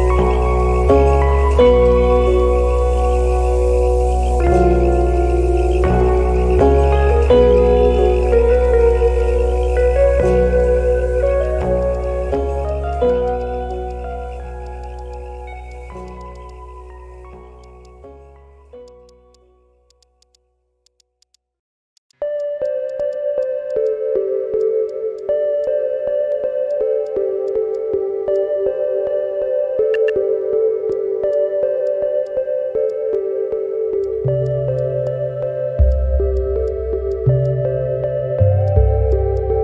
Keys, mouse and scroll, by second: 0.2 alt+click, 0.4 alt+middle click, 0.6 alt+click, 1.0 middle click, 1.1 Tab, 1.9 alt+click, 4.0 alt+click, 5.0 alt+click, 5.8 shift+click, 6.0 shift+click, 6.3 shift+click, 7.2 shift+click, 7.7 alt+click, 8.3 shift+click, 8.9 shift+click, 8.9 shift+click, 9.2 shift+click, 9.4 alt+middle click, 9.9 alt+click, 11.6 shift+click, 12.0 shift+click, 12.2 ctrl+z, 12.3 shift+click, 12.9 shift+click, 13.1 shift+click, 13.9 alt+click, 15.0 shift+click, 15.1 shift+click, 16.2 shift+click, 16.3 shift+click, 17.6 ctrl+click, 18.9 ctrl+click, 19.3 shift+click, 21.0 shift+click, 21.3 shift+click, 22.1 shift+click, 22.4 alt+click, 22.6 shift+click, 23.0 shift+click, 23.7 shift+click, 25.5 scroll down 1, 25.6 alt+click, 26.2 Tab, 26.7 alt+click, 27.7 alt+click, 28.0 alt+middle click, 30.1 Tab, 30.9 alt+click, 31.8 alt+click, 32.0 alt+middle click, 32.2 alt+click, 32.7 alt+middle click, 33.2-33.6 scroll up 1, 33.6 middle click, 33.7 Tab, 34.0 alt+click, 34.7 scroll down 1, 34.7 alt+click, 35.4 middle click, 35.5 Tab, 35.9 alt+click, 37.4 shift+click, 38.2 Tab, 38.2 middle click, 38.3 Tab, 38.6 alt+click, 38.8 alt+middle click.